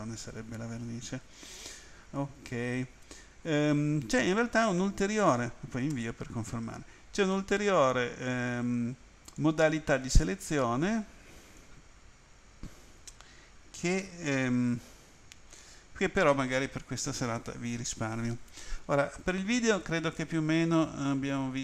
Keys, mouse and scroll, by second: 5.9 Return, 9.4 click, 21.2-21.6 scroll up 4.